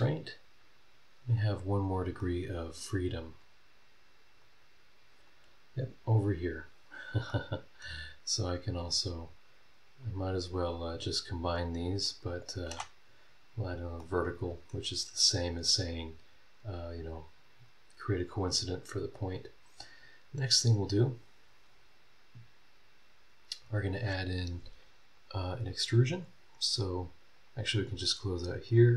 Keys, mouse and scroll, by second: 0.7 click, 1.6 scroll down 2, 1.8 middle click, 2.3 right click, 3.0 middle click, 3.0-3.6 scroll up 3, 3.3 middle click, 3.6 middle click, 4.4-5.4 drag, 5.7 scroll down 1, 6.7-7.2 scroll down 1, 7.3 middle click, 7.4 click, 8.1-8.5 scroll up 1, 9.2 click, 10.0 click, 10.7 click, 11.4 click, 12.2 click, 12.4-13.5 middle drag, 12.7 v, 13.5 scroll down 1, 14.0 click, 14.1 middle click, 14.7 right click, 14.8 scroll down 1, 15.5 scroll up 1, 18.6 scroll down 1, 19.2 scroll up 1, 22.4 scroll down 1, 23.2-23.6 scroll up 2, 25.1 click, 27.3 click, 27.7 click, 28.7 click.